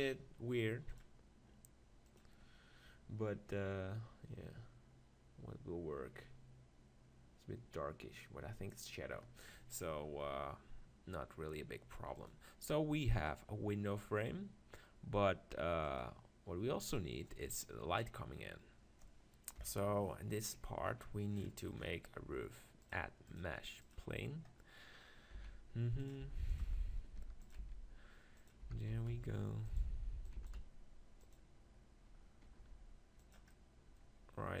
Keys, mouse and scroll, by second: 0.9-2.7 drag, 13.3-15.0 drag, 19.6 KP_7, 20.4-23.2 middle drag, 23.2-24.7 drag, 25.4-27.6 typing, 26.1 click, 27.0-28.9 middle drag, 28.6 g, 28.9 click, 29.8-33.2 drag, 29.9 g, 30.4 s, 32.6 s, 33.5-34.6 middle drag.